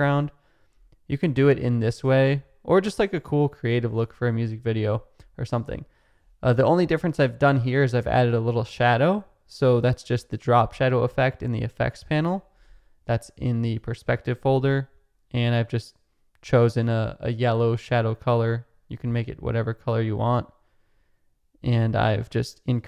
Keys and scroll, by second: 12.1-13.1 typing.